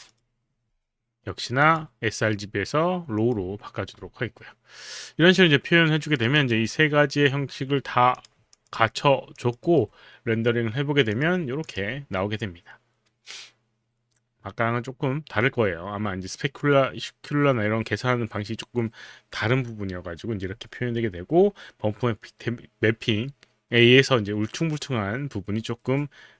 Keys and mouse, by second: 0.1 click, 1.6 click, 3.1 click, 6.3 click, 8.2 click, 8.5 alt+click, 10.3 alt+right click, 11.1 click, 11.8 click.